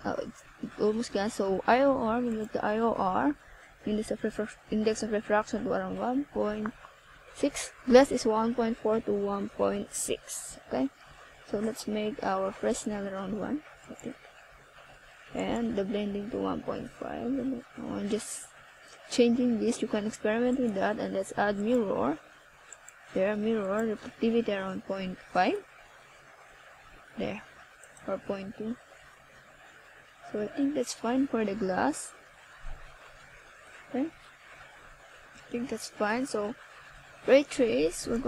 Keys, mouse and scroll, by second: 0.0 shift+a, 4.2 KP_1, 6.9 click, 10.2 r, 13.1 click, 14.1 click, 17.1 click, 18.6 r, 20.2 click, 23.8 s, 27.9 click, 28.2 s, 28.8 click, 29.3 click, 35.3 click, 37.6 right click.